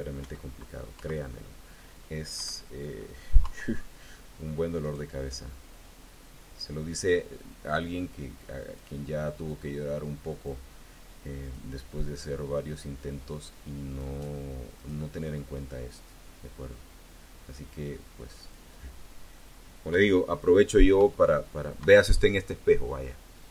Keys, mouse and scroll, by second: 0.0 KP_1, 0.8 KP_3, 2.2 KP_1, 3.2 KP_3, 4.6 click, 5.6-8.8 drag, 9.3-10.5 drag, 12.1-14.0 drag, 14.6 click, 15.4-18.6 drag, 19.8 KP_1, 20.8 KP_3, 21.6 KP_1, 22.8-23.1 scroll up 1.